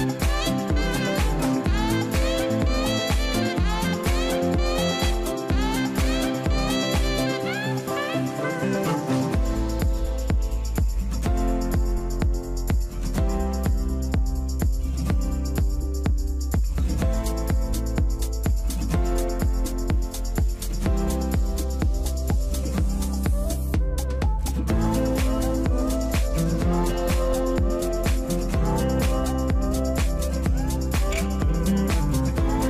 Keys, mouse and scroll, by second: 28.1-29.0 scroll down 1, 29.0-30.2 scroll down 1.